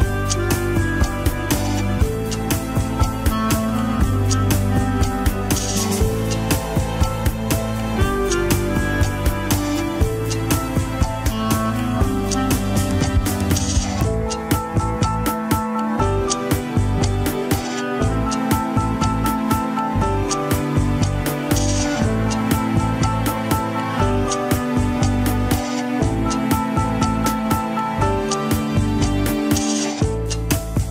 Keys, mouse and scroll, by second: 0.4 middle click, 1.1 scroll up 1, 1.6-2.9 drag, 2.9 middle click, 3.4 click, 4.0 middle click, 4.7-6.4 drag, 6.4 middle click, 7.0 click, 7.5 middle click, 8.1-9.0 scroll down 1, 9.0-10.1 drag, 10.1-11.2 middle drag, 11.2 click, 11.5 middle click, 12.2 click, 12.5 middle click, 13.0 click, 13.8 middle click, 14.4 click, 14.7-15.9 middle drag, 15.9-17.7 drag, 17.7 middle click, 18.6-20.2 drag, 20.2 ctrl+Left, 20.7 middle click, 21.5-22.6 drag, 22.6 middle click, 23.1 click, 23.8 middle click, 24.5-26.1 drag, 26.1 f, 26.9-28.0 drag, 28.0-29.0 middle drag, 29.0 click, 29.5 middle click, 30.1-30.9 drag.